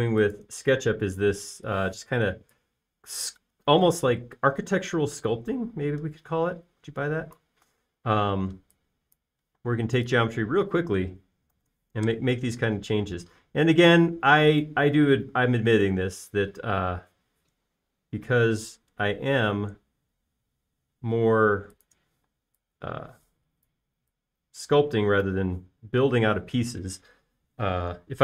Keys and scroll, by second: 2.1 p, 3.2 Escape, 4.7 space, 5.1 e, 9.1 space, 10.5-11.0 typing, 12.3-13.9 typing, 23.2 p, 24.5 Escape, 26.4-27.1 typing.